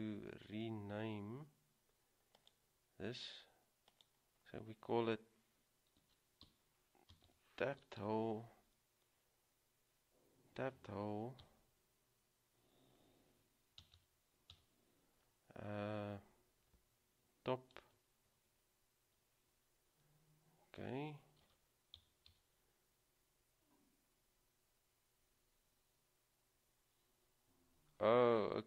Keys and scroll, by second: 6.1-6.6 typing, 8.1 typing, 11.6 typing, 14.0 typing, 21.5-22.1 typing, 27.2 typing.